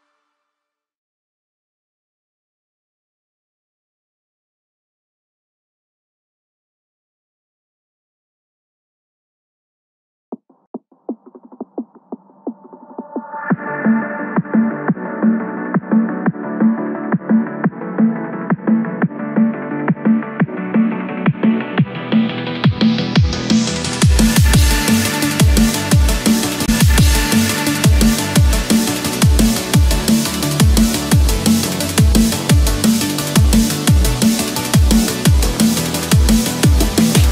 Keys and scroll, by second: 2.7 ctrl+-, 4.0 ctrl+=, 7.6 ctrl+-, 8.2 ctrl+-, 9.2 ctrl+=, 9.6 ctrl+space.